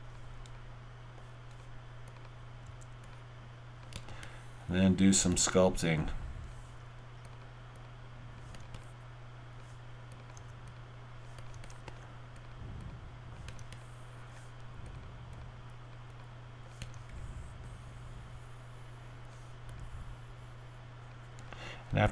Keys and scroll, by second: 2.6 w.